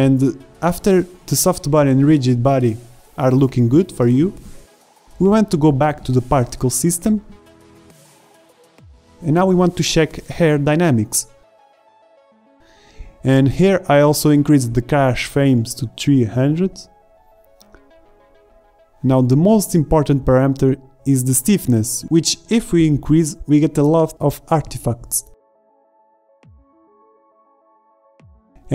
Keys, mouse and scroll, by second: 0.0-0.4 typing, 4.1 alt+a, 4.5 shift+Left, 5.7 alt+a, 8.5 ctrl+s, 10.3 alt+a, 10.3 shift+Left, 13.0 alt+a, 13.0 shift+Left, 16.2 KP_0, 19.1-22.2 middle drag, 22.4-23.9 middle drag, 24.4 shift+Left, 24.6 alt+a, 28.5 alt+a.